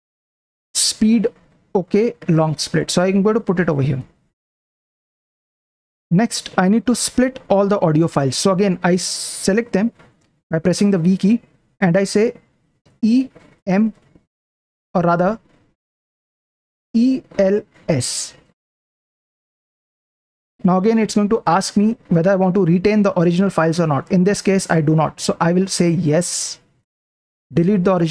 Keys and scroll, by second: 2.6 Return, 3.8 p, 4.0 p, 5.6 super+Print, 9.3 v, 13.0 e, 13.6 m, 14.9 Escape, 16.9-17.9 typing, 25.4 Down, 26.9 Return.